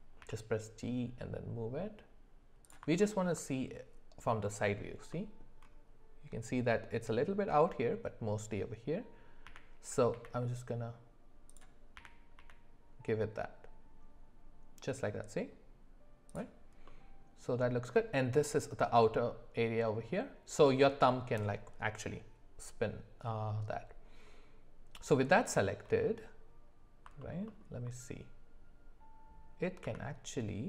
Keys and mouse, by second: 0.2 g, 3.0 alt+middle click, 12.0 g, 16.8-17.9 middle drag, 19.9-20.9 middle drag, 23.3-25.5 middle drag, 27.2 alt+middle click, 27.5 alt+middle click, 29.8 s.